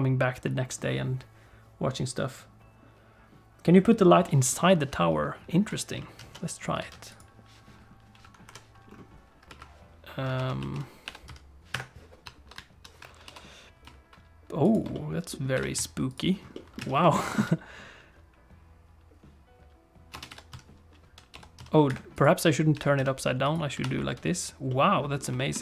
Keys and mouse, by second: 6.8 alt+shift+a, 7.1 click, 8.4 KP_1, 9.4 KP_3, 10.3 alt+r, 10.6 alt+g, 12.2 ., 12.5 ,, 13.2 r, 14.9 middle click, 15.5 g, 16.5 alt+middle click, 16.8 alt+a, 17.0 shift+middle click, 17.1 middle click, 17.3 space, 20.1-21.5 typing, 21.8 Escape, 22.7 g, 23.8 alt+r, 24.7 middle click, 25.3 shift+click.